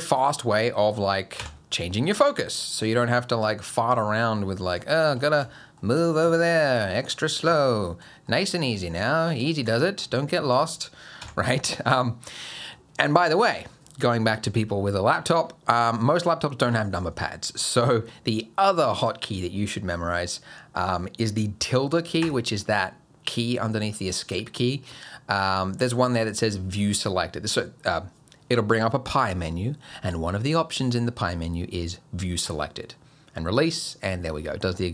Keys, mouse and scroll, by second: 0.1 click, 1.4 KP_Decimal, 2.0-2.5 scroll down 7, 2.5 middle click, 3.1-3.4 scroll down 2, 3.4 middle click, 3.9 middle click, 4.9 shift+middle click, 5.2 middle click, 5.6 shift+middle click, 6.0 middle click, 6.4 shift+middle click, 6.8-7.3 scroll down 6, 7.3 middle click, 7.6 shift+middle click, 8.1 middle click, 8.5 middle click, 8.9 shift+middle click, 9.5 middle click, 9.8 shift+middle click, 10.2-10.5 scroll up 2, 10.5 click, 11.2 KP_Decimal, 11.7-12.5 scroll down 4, 12.0 middle click, 12.7-13.2 scroll down 2, 13.3-13.7 scroll down 1, 15.7 click, 20.3 middle click, 34.4 scroll down 4, 34.7 middle click.